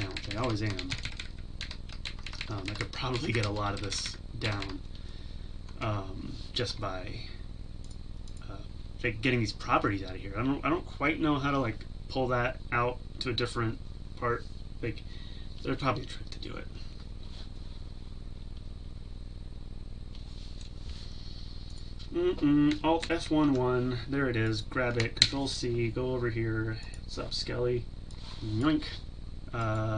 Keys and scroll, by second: 23.1 alt+F1, 25.2 ctrl+c, 28.4 ctrl+c.